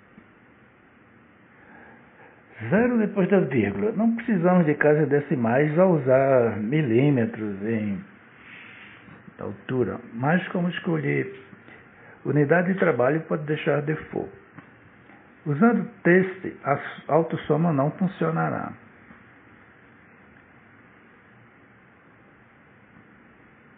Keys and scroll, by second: 5.5 Return.